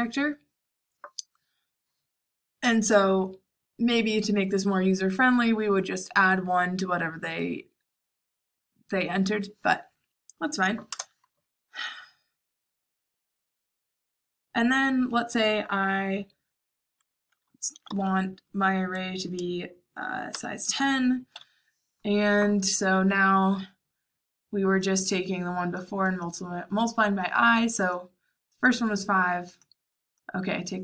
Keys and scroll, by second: 10.8 Return, 17.4-18.3 typing, 20.3 Return.